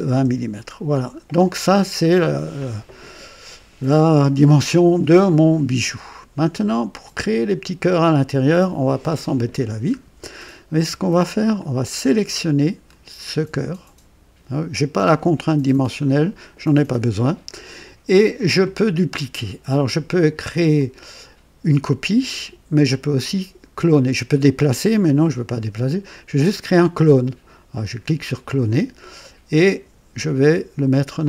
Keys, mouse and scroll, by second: 0.0 KP_0, 0.2 Return, 0.2 Return, 1.6 scroll up 2, 2.2-3.1 right drag, 7.4-8.6 drag, 9.2 scroll up 2, 9.9-10.4 scroll down 1, 11.5-13.1 drag, 20.7 click, 28.5 click.